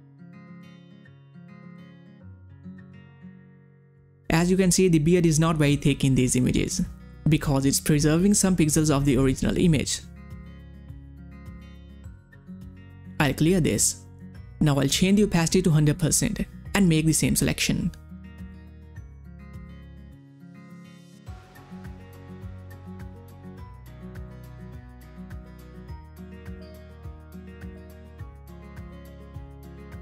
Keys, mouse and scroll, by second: 6.0 click, 12.1-21.0 drag.